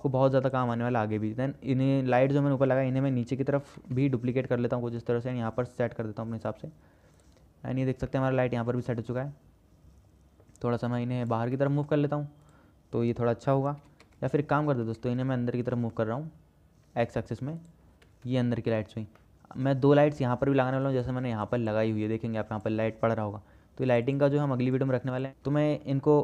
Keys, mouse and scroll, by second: 0.3 middle click, 3.9 shift+d, 8.3-9.0 middle drag, 9.5-10.6 middle drag, 11.4 click, 11.7-12.3 middle drag, 14.0 g, 18.4 KP_0, 19.4-19.9 shift+middle drag.